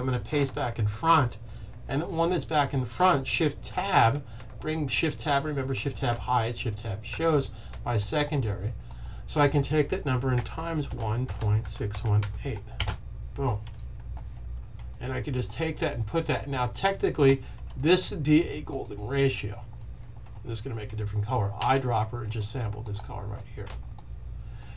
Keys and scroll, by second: 3.6 Tab, 6.0 Tab, 7.0 Tab, 10.2-12.6 typing, 21.5 i.